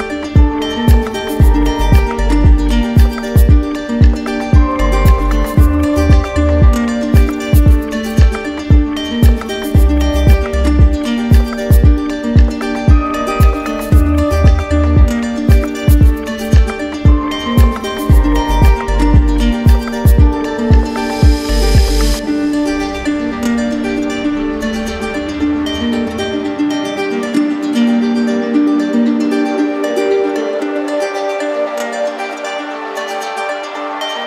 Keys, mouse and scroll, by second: 3.0 middle click, 5.7 click, 6.4 click, 7.5 right click, 8.5 right click, 10.1 click, 11.2 right click, 12.0 click, 12.6 click, 14.7 right click, 16.4 click, 17.2 right click, 18.4 click, 19.3 alt+click, 20.3 alt+right click, 20.6 right click, 22.4 click, 23.5 alt+click, 24.4 right click, 25.6 right click, 26.5 click, 27.4 right click, 28.9 click, 29.5 right click, 30.7 click, 31.3 right click, 32.0 alt+right click, 32.9 right click, 33.7 click.